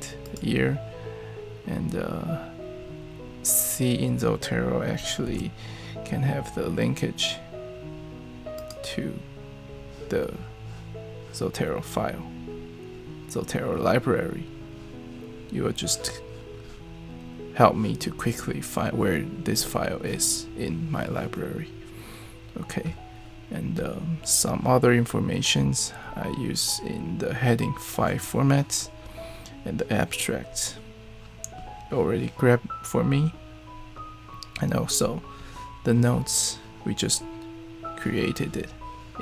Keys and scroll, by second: 5.3 super+e.